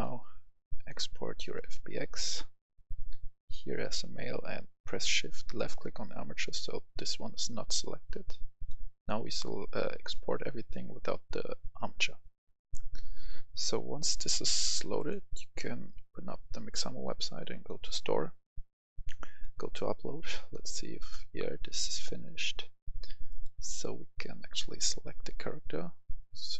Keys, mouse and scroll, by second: 5.6 shift+click, 8.5-9.7 drag, 15.3-25.6 drag.